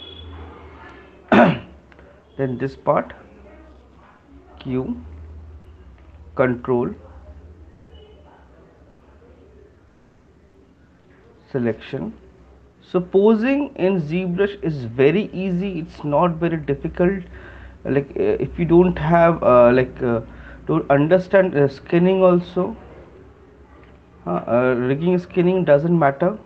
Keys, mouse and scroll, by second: 1.1 alt+click, 4.1 q, 11.0 ctrl+click, 13.3 shift+click, 15.2 right click, 16.3 right click, 20.4 ctrl+click, 23.1 shift+click, 24.3 click, 26.4 alt+click.